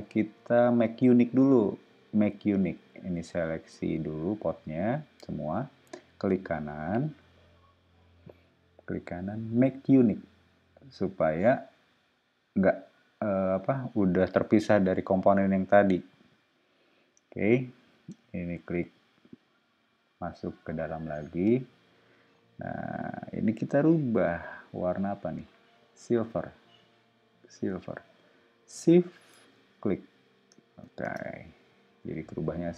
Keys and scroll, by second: 24.2 b, 31.0 space, 31.9 ↺.